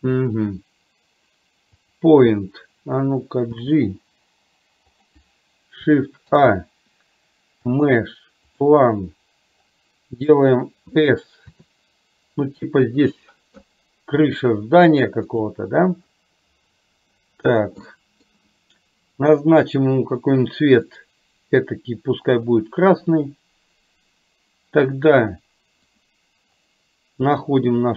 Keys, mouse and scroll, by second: 2.0 click, 3.6 g, 6.3 shift+a, 11.6 s, 14.3 s, 18.1 middle click, 19.3 click, 21.0 click, 26.0 click.